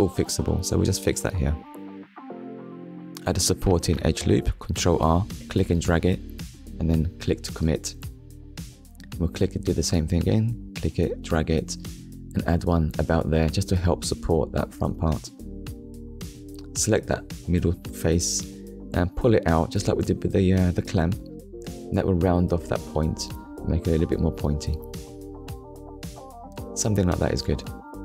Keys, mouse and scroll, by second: 5.0 click, 5.7 middle click, 6.4 shift+middle click, 8.4 ctrl+r, 9.2 click, 13.2 click, 13.7 middle click, 15.1 click, 15.6 click, 16.6 click, 18.6 click, 19.8 click, 22.3 KP_1, 23.3 scroll up 1, 23.9-24.2 scroll up 2, 24.3 shift+middle click, 25.3 click.